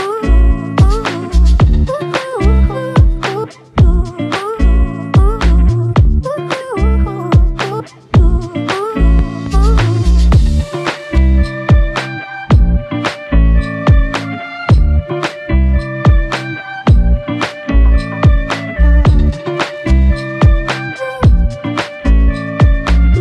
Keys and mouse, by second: 3.2 alt+shift+click, 22.0 ctrl+i.